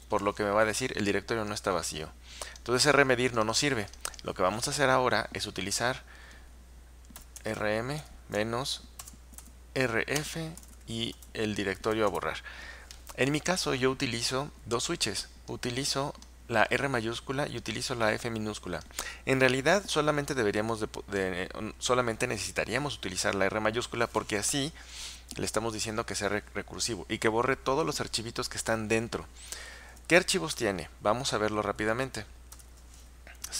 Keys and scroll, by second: 7.0-12.9 typing, 32.6 ctrl+u.